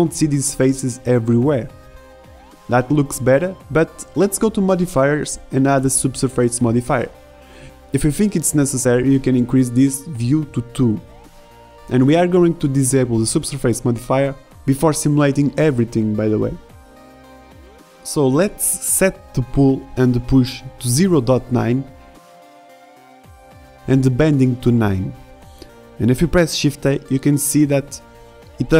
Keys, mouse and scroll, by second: 2.2-6.3 drag, 10.4-11.8 middle drag, 18.4 shift+Left, 18.8 alt+a, 22.9 BackSpace, 25.2 click, 27.1 alt+a.